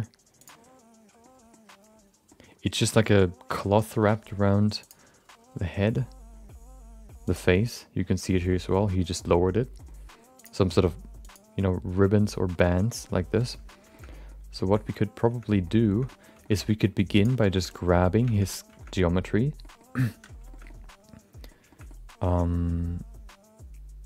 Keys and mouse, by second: 1.3 middle click, 2.4 middle click, 4.8-7.7 drag, 8.4 middle click, 9.1 middle click, 10.5-11.7 drag, 12.8 middle click, 13.9 shift+middle click, 14.1 middle click, 14.6 shift+middle click, 14.8 middle click, 15.4 middle click, 15.9 shift+middle click, 16.1 middle click, 16.4 shift+middle click, 16.6 middle click, 17.5 shift+middle click, 17.7 middle click, 18.3 Tab, 18.9 middle click, 19.6 middle click, 20.1 3, 20.5 shift+middle click, 20.6 middle click, 21.6 shift+middle click, 21.8-24.0 middle drag.